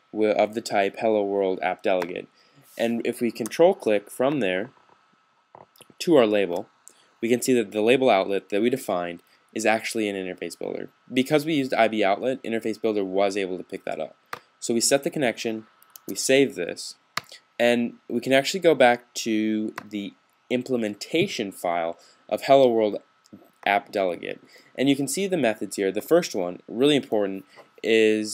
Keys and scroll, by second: 15.7 typing.